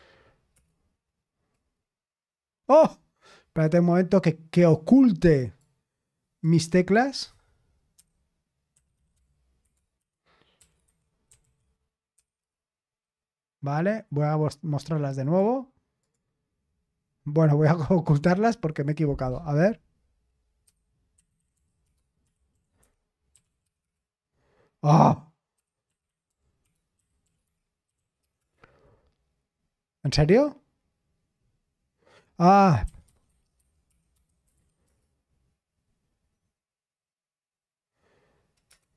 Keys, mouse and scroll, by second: 0.5 Return, 4.5 click, 5.4 right click, 6.4 click, 6.6 click, 18.1 click, 18.7 click.